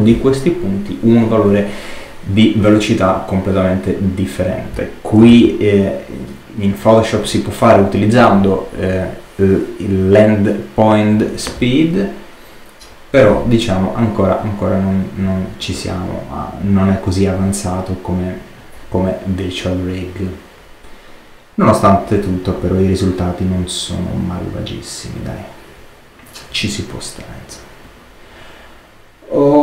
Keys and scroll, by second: 5.2 super+z.